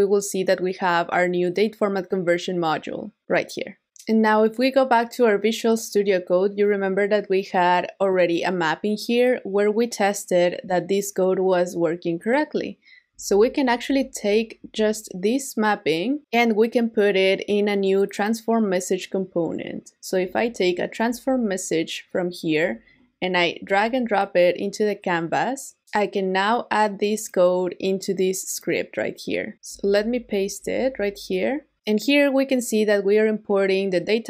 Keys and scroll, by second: 13.3 super+a, 13.9 super+c, 29.8 super+a, 30.6 super+v.